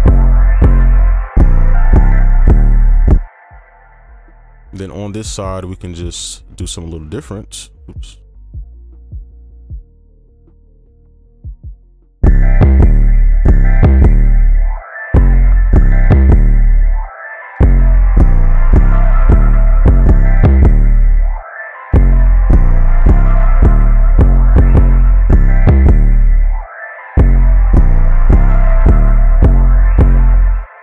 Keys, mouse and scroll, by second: 2.1 space, 2.4 space, 2.7 space, 3.2 ctrl+click, 3.9 right click, 4.8 ctrl+a, 5.3 shift+click, 8.9 double click, 11.1 right click, 11.7 double click, 13.2 space, 13.4 space, 14.1 right click, 15.7 space, 15.9 right click, 19.9 space, 20.0 space, 24.9 space, 25.2 space, 27.2 right click, 30.3 space, 30.5 right click.